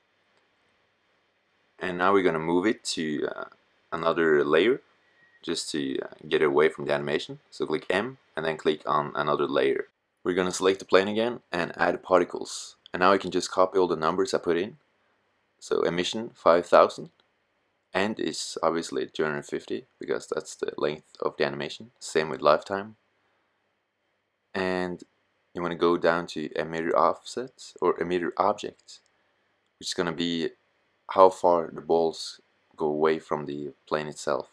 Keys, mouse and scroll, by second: 6.7 m, 9.7 right click, 12.4-15.5 drag, 15.5 middle click, 15.6 KP_0, 19.1-20.2 middle drag, 22.2-26.2 middle drag, 32.5-34.5 middle drag.